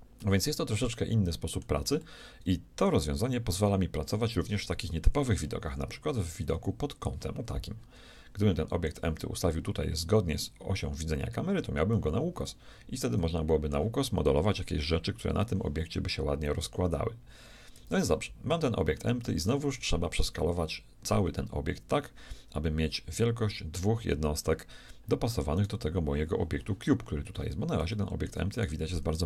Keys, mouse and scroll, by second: 0.2-3.8 middle drag, 5.0 KP_1, 5.6-6.2 KP_6, 6.6 KP_8, 6.8 KP_8, 8.4-10.2 middle drag, 11.9-13.8 middle drag, 17.7 KP_1, 18.6-23.7 shift+middle drag, 25.6-27.6 right drag, 27.0-29.2 middle drag, 28.5-29.2 shift+right drag.